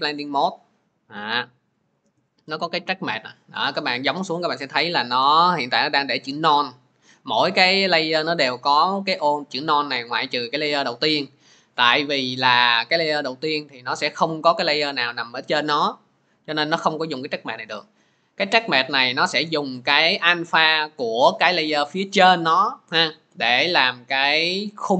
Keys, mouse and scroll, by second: 7.4-12.2 drag, 18.5 click, 19.3 click.